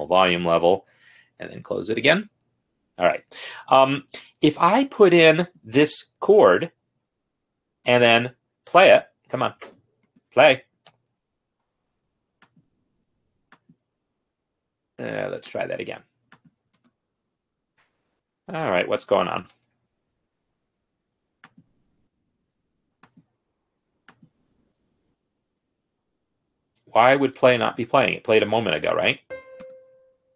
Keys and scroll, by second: 2.9 ctrl+F10, 7.2 space, 17.0 space, 19.8 ctrl+F10, 24.9 space, 29.9 space.